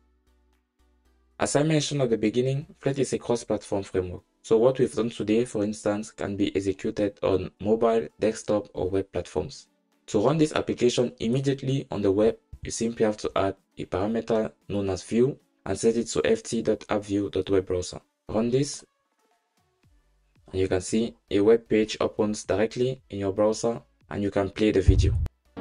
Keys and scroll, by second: 12.5 super+v, 18.8 ctrl+shift+r.